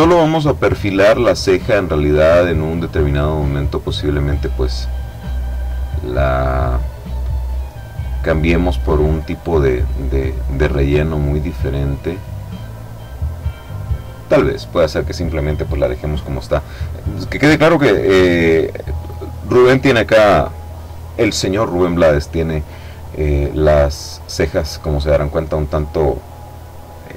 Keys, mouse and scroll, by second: 0.9 click, 2.2 click, 3.0 click, 4.5-5.5 drag, 5.6 click, 6.8-10.0 drag, 10.3-12.4 drag, 13.6 click, 24.2-25.6 middle drag.